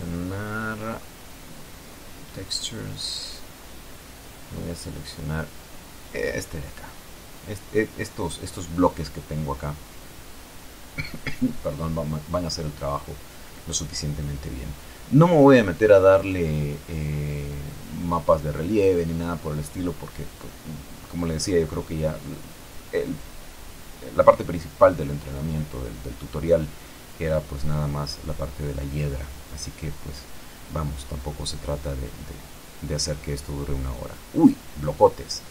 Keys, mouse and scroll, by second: 1.0 click, 3.0 click, 4.5 click, 10.2 click, 12.7 click, 18.6 Tab, 21.2-22.2 drag, 24.7 click, 28.9 click, 30.4 click, 32.0 click.